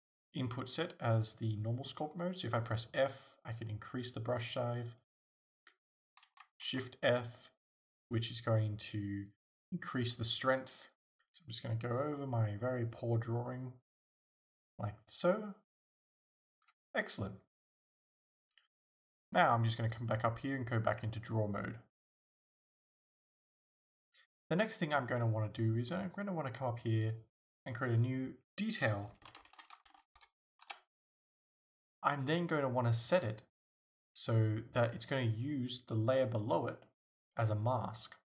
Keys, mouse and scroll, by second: 2.6 f, 4.6 right click, 5.2 ctrl+f, 6.6 shift+f, 11.2-27.4 drag, 27.9 click, 29.4-38.1 drag, 30.8 Return.